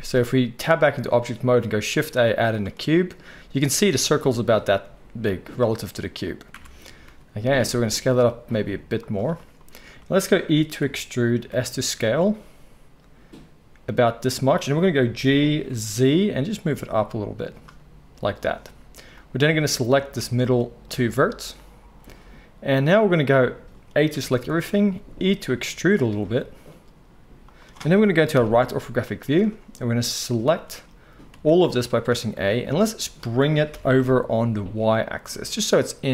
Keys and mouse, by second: 0.7 Tab, 1.7 shift+a, 3.8 click, 3.8 middle click, 6.5 Tab, 7.1 s, 9.3-23.1 shift+drag, 10.8 e, 15.2 g, 19.1-27.5 middle drag, 19.1-23.1 right drag, 20.1 x, 24.1 a, 24.9 e, 27.5-31.6 drag, 28.3 KP_3, 30.1 z, 31.3 a, 31.6-36.1 shift+right drag, 33.7 g.